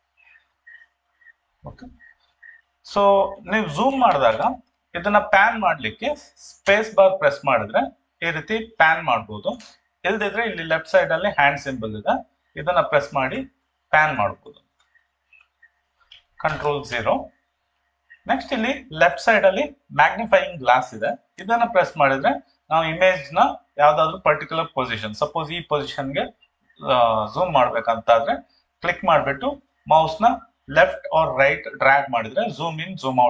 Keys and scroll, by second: 16.5 ctrl+0.